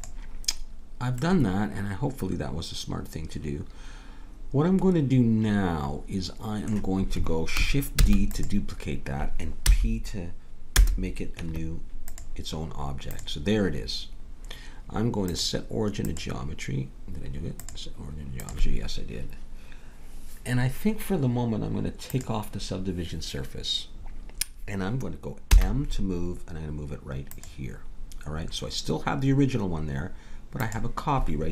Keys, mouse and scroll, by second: 1.3-3.2 middle drag, 8.0 shift+d, 9.6 p, 11.4 Tab, 14.0-15.0 drag, 15.2-19.4 drag, 22.0-23.9 drag, 25.5 m, 30.6-31.5 drag.